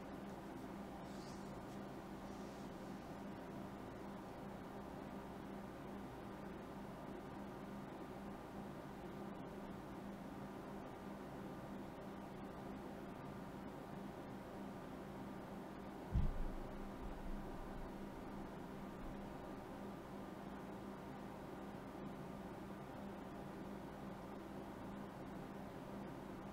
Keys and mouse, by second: 1.3-4.2 drag, 8.6-10.5 drag, 12.3 BackSpace, 24.5-26.2 drag, 26.1 middle click, 26.3 ctrl+s.